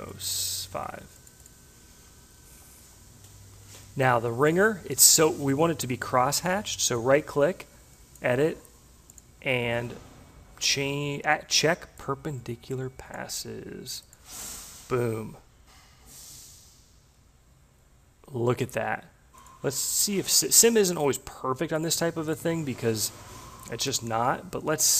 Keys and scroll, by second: 0.3 5.